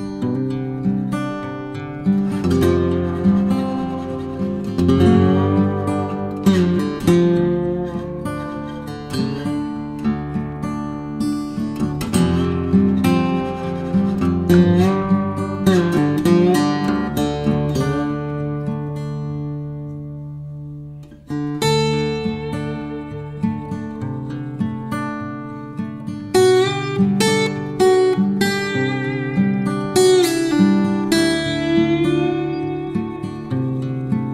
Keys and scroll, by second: 6.4 ctrl+d, 10.4 ctrl+d.